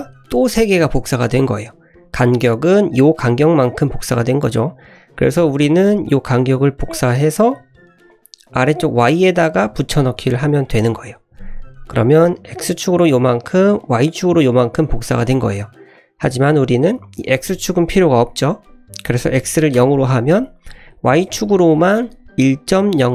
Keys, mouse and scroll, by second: 5.7-8.2 drag, 8.4-11.3 drag, 17.0-20.3 drag, 20.8 click, 21.0-21.5 scroll up 3, 21.5 shift+middle click.